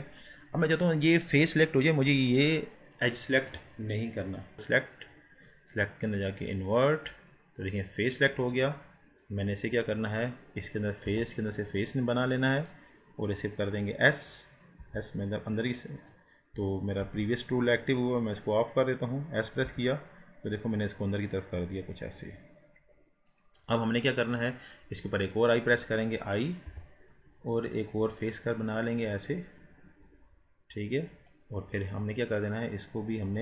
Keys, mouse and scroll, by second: 4.6-7.4 drag, 7.4-9.6 middle drag, 9.6-10.0 scroll up 2, 11.1 i, 14.9 s, 17.1 ctrl+z, 18.5 click, 19.7 s, 25.2-26.7 middle drag, 26.7 i, 31.5 click.